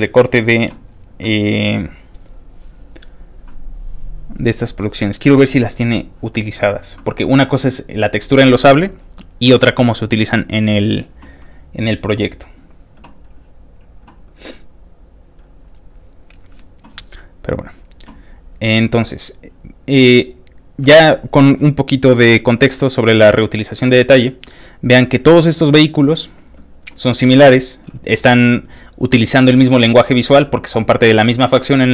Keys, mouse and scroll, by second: 2.3 middle click, 2.7 click, 4.4-5.6 scroll down 6, 6.1 middle click, 6.2-6.8 scroll up 1, 7.0 middle click, 8.1 click, 9.2 middle click, 9.2 scroll down 1, 10.7 middle click, 12.3 scroll up 1, 12.4 scroll down 2, 12.4 scroll down 1, 13.8 middle click, 17.5 click, 18.3 middle click, 18.3 scroll down 1, 19.0 middle click, 19.4-20.2 scroll down 3, 20.2 scroll up 1, 20.3 scroll down 1, 24.1 click, 24.2-25.7 scroll up 1, 25.7 click, 26.2-26.7 scroll down 2, 27.2-27.6 scroll down 2, 28.3-28.7 scroll down 2.